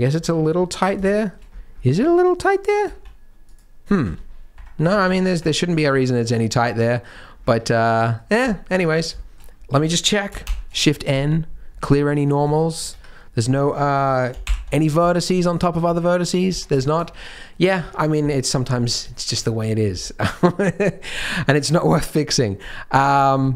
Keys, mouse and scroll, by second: 0.2 Tab, 0.6 middle click, 1.0 shift+middle click, 1.5-2.4 scroll up 6, 1.9 Tab, 2.4 click, 2.8 z, 3.4 click, 4.0 g, 4.9 click, 5.0 g, 5.7 Tab, 6.1 z, 6.6 middle click, 7.3 scroll down 4, 7.4 Tab, 7.9 middle click, 9.3 scroll up 5, 9.6 a, 10.4 shift+n, 10.9 Tab, 11.7 middle click, 12.5 shift+middle click, 12.9 Tab, 14.4 alt+m, 16.4 Tab, 16.7 shift+middle click, 16.9 scroll up 1, 17.2 middle click, 17.6-18.2 scroll down 4, 17.8 Tab, 18.2 middle click, 18.6-19.1 scroll up 3, 19.1 shift+middle click, 19.4 scroll down 1, 19.6 middle click, 20.0 shift+middle click, 20.4 middle click, 20.9 scroll up 2, 21.1 z, 22.4-23.5 scroll down 9, 22.6 middle click, 23.4 middle click.